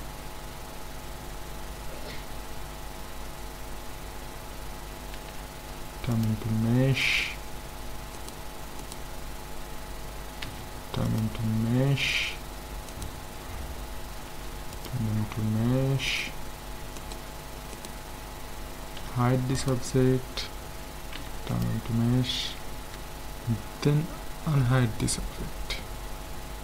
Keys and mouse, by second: 0.9-4.8 middle drag, 1.6 Tab, 2.2 Tab, 5.1 alt+c, 8.2-10.3 drag, 10.4 alt+c, 14.3 alt+c, 16.1-19.5 right drag, 19.0 h, 19.6-21.4 right drag, 21.1 alt+c, 22.8 a, 24.5 alt+h.